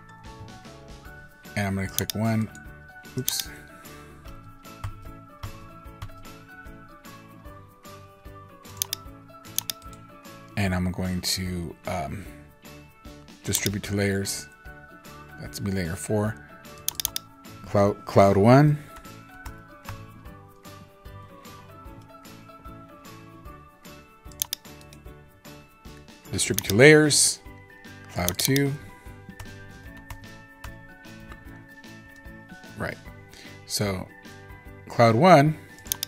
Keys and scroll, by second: 0.2 super+z, 4.1 super+z, 4.8 super+z, 5.3 super+z, 5.9 super+z.